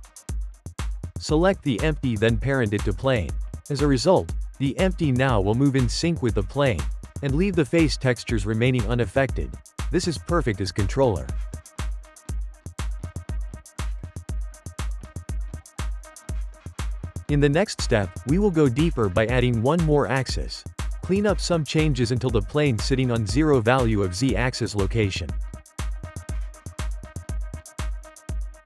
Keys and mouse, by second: 1.2 click, 1.7 middle click, 2.6 shift+click, 3.2 ctrl+p, 4.7 click, 5.0-5.7 middle drag, 5.7 g, 8.2 shift+middle click, 8.4 click, 8.8 g, 9.8 click, 10.6 g, 13.2 shift+middle click, 13.5 click, 13.7 g, 14.7 shift+middle click, 15.5 click, 15.9 click, 16.2 click, 16.7 g, 18.7 ctrl+z, 19.1 ctrl+z, 19.5 ctrl+z, 19.9 ctrl+z, 20.2 ctrl+z, 20.6 ctrl+z, 20.9 ctrl+z, 21.2 ctrl+z, 21.7 ctrl+z, 22.6 ctrl+z, 23.0 ctrl+z, 23.5-24.1 shift+middle drag, 24.1 ctrl+z, 24.6 ctrl+z, 24.9 ctrl+z, 26.6 Tab, 26.9-28.6 drag.